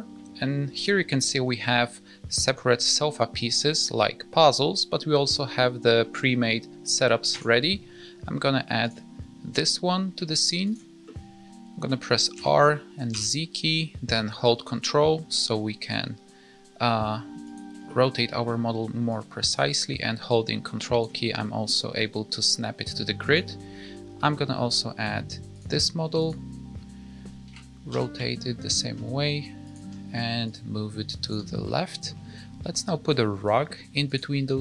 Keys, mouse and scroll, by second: 8.8 click, 9.4-10.6 scroll up 2, 10.6 click, 11.0 middle click, 12.3 r, 17.8 middle click, 19.0 ctrl+click, 23.2 click, 26.1 click, 26.6-27.4 scroll up 2, 27.4 r, 30.4 ctrl+click, 31.6 middle click, 34.0 click.